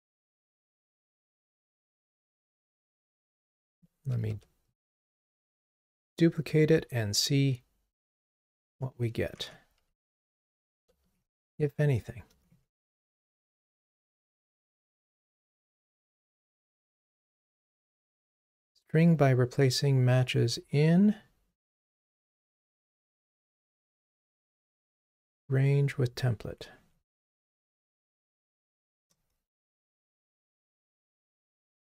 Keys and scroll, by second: 4.3 super+d, 29.1 Return.